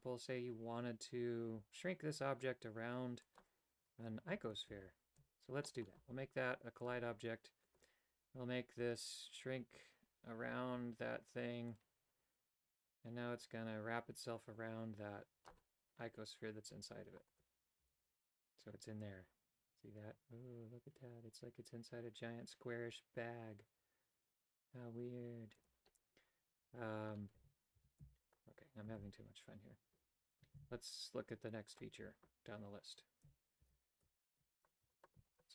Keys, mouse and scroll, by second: 5.0-5.7 typing, 5.7 middle click, 6.9 click, 7.7 right click, 11.8-15.7 drag, 17.4 right click, 17.9 g, 27.5 a, 27.9 a, 28.2 x, 28.9 shift+a, 30.6 shift+a, 33.6 alt+g, 34.0 Tab, 34.4 w, 34.8 w, 35.3 w.